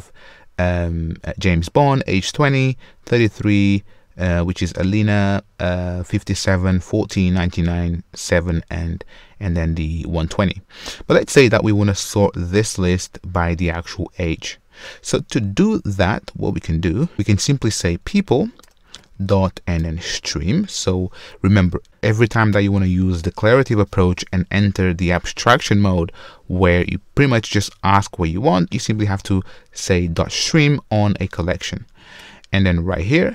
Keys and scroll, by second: 18.6 Return.